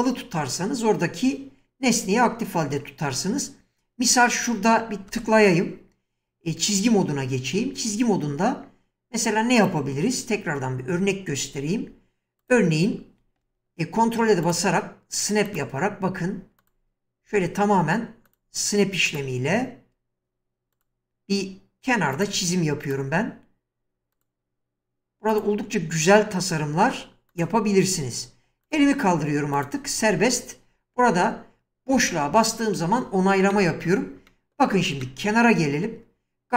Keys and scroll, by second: 5.1 space, 32.0 space.